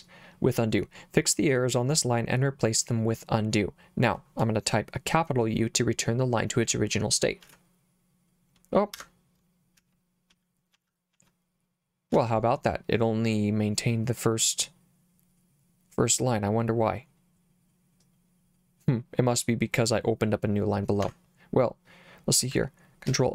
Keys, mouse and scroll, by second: 7.4 shift+u, 8.9 Escape, 9.8 shift+u, 10.3 shift+u, 10.7 shift+u, 11.1 shift+u, 21.0 Escape, 23.1 ctrl+r.